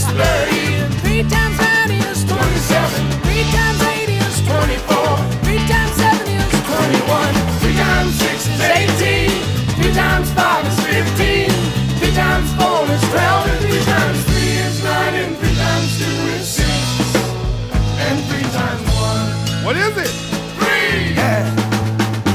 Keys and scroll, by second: 1.7 shift+super+j, 6.0 shift+super+t.